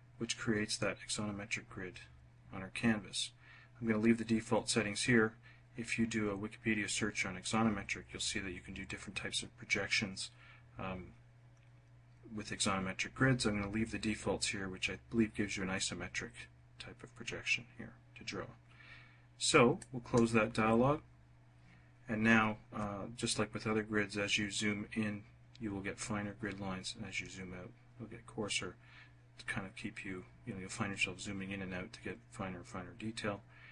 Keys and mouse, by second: 19.7 click.